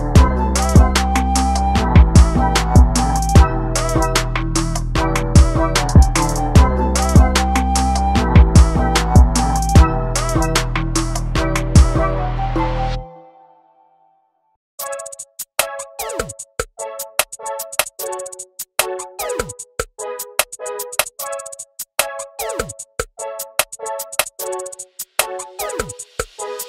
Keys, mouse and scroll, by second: 0.2 alt+a, 1.1 KP_Decimal, 1.3 scroll down 2, 1.4 middle click, 2.3 scroll down 1, 2.4 shift+middle click, 2.5 scroll up 2, 2.6-2.9 middle drag, 2.9 alt+a, 3.0 shift+middle click, 3.1 scroll up 1, 3.2 middle drag, 3.4 drag, 3.5 middle drag, 3.7 alt+a, 3.8 scroll down 1, 3.8-4.3 shift+middle drag, 4.3 scroll down 1, 4.4 shift+middle drag, 4.6 click, 4.8 /, 4.9 scroll up 1, 5.0 middle click, 5.1 alt+z, 5.5 scroll down 2, 5.6 alt+a, 5.7-6.0 middle drag, 6.0-6.4 scroll down 1, 6.4 z, 7.1 z, 7.4 z, 7.7 /, 7.9 middle click, 8.0 scroll up 5, 8.1 middle drag, 8.3 scroll down 2, 8.4-8.8 middle drag, 8.9 middle drag, 9.2-9.6 middle drag, 9.6 shift+middle click, 9.7 scroll up 6, 10.0-10.7 middle drag, 10.7 scroll down 1, 10.8 shift+middle click, 10.9 scroll up 1, 10.9-11.4 middle drag, 11.4-11.9 scroll down 2, 11.5 click, 11.7 ctrl+space, 12.1 ctrl+space, 12.3 middle click, 12.4-12.7 scroll up 2, 12.7 click, 13.0-13.4 scroll down 2, 13.3 alt+a, 13.4 shift+middle click, 13.5 scroll up 1, 13.6 middle click, 14.2 scroll up 1, 14.4 click, 15.6-17.4 drag, 17.5 scroll up 1, 17.6 middle click, 18.4 scroll down 1, 19.1-20.1 ctrl+shift+drag, 20.1-20.5 scroll down 3, 20.9 ctrl+shift+click, 21.1 scroll up 1, 21.3 middle click, 21.4-22.0 scroll down 2, 21.5 shift+middle click, 22.0-24.6 drag, 24.8 scroll down 4, 24.9 alt+a, 25.0 middle click, 25.2 click, 25.7-26.3 scroll up 4, 25.8 alt+a, 25.9 shift+middle click, 26.1 click, 26.3 shift+middle click.